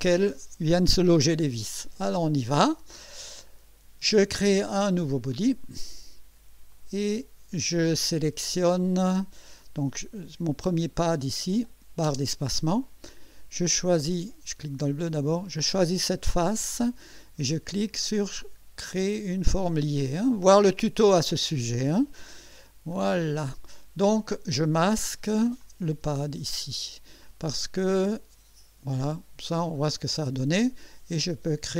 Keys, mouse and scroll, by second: 5.3 click, 6.7 click, 10.7 click, 12.0 space, 12.8-13.5 drag, 14.3 click, 15.4 click, 20.0 click, 22.9 click, 25.6 click, 26.0 space, 27.2-29.1 drag, 29.8 click, 31.5 click.